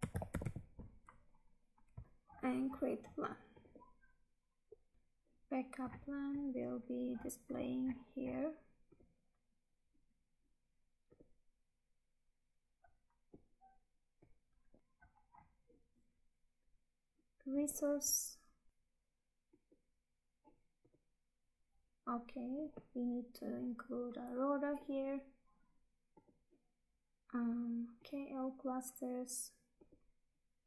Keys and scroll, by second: 2.0 Tab, 4.9 Tab, 14.7 Tab.